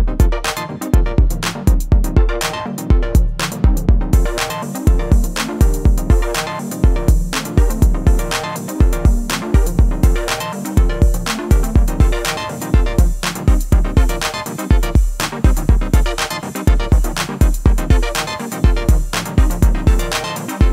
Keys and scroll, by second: 1.3 r, 2.0 x.